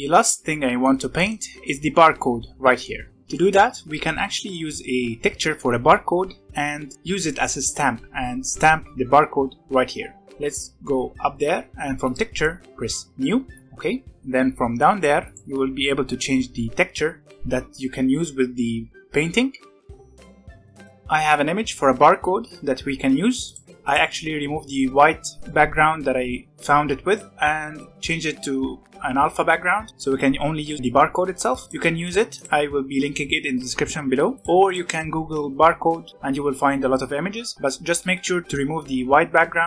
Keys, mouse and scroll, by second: 0.2 scroll down 1, 0.5 middle click, 1.3-2.8 scroll up 1, 2.8 middle drag, 3.1 scroll up 1, 3.3-8.9 middle drag, 10.2-10.8 scroll down 4, 12.0-13.6 drag, 15.2 click.